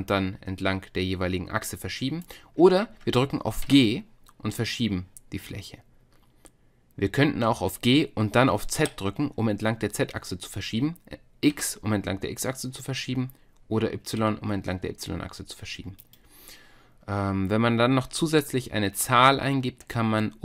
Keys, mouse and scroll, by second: 3.7 g.